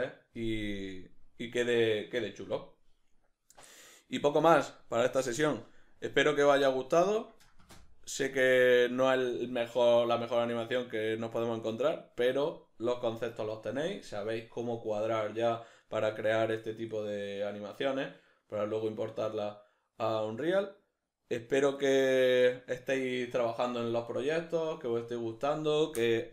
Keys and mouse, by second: 7.1 middle click, 10.1-12.7 middle drag.